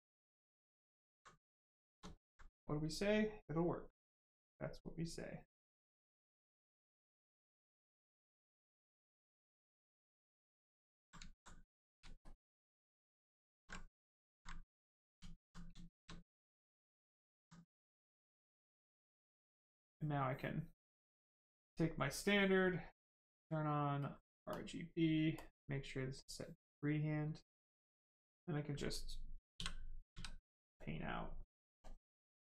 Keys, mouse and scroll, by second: 1.0 alt+right click, 1.6 right click, 1.6 right click, 1.8 shift+right click, 2.0 alt+right click, 4.0 click, 4.7 right click, 6.2 click, 9.4 click, 10.6 ctrl+click, 11.2 alt+right click, 11.9 ctrl+right click, 13.8 alt+right click, 14.5 right click, 14.6 right click, 15.1 alt+right click, 15.6 shift+right click, 16.0 alt+right click, 18.6 right click, 22.6 click, 27.4 click, 28.8 right click, 29.5 l, 30.0 s, 30.2 click, 31.2 right click, 31.8 click.